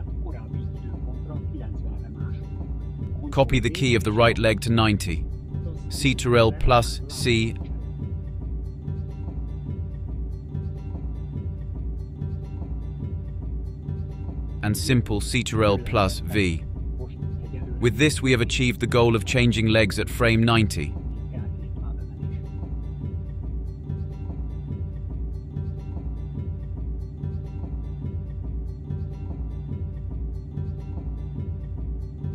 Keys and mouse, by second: 2.4 click, 5.9 ctrl+c, 7.2-11.0 drag, 12.8 ctrl+v, 15.1-32.3 drag.